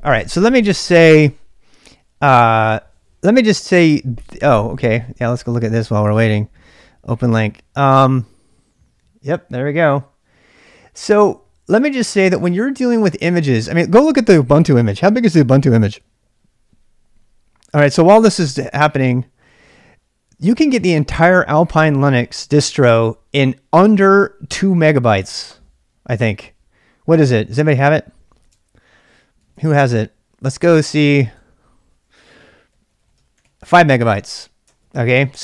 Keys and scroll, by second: 28.5 super+Tab, 29.4 super+Tab, 32.4-33.9 typing, 34.6 Return.